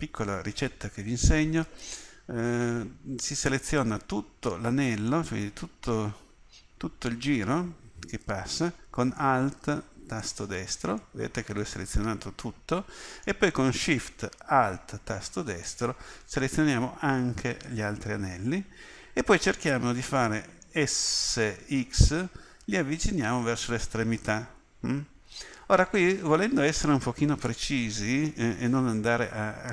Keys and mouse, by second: 1.6-9.4 middle drag, 10.2-11.9 middle drag, 13.0-15.7 middle drag, 18.0-20.0 middle drag, 21.2 s.